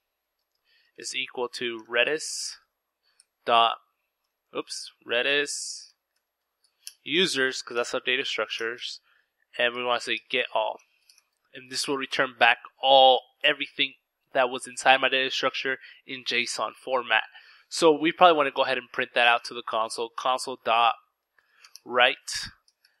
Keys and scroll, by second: 0.0-1.5 typing, 2.6-10.8 typing, 16.2-22.4 typing.